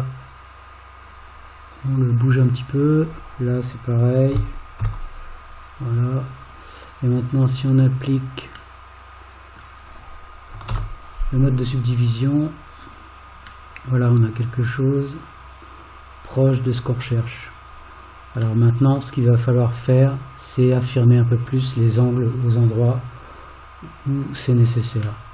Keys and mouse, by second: 2.0 click, 4.3 g, 8.9 middle click, 10.7 alt+z, 13.7-16.8 middle drag, 18.7-25.0 middle drag.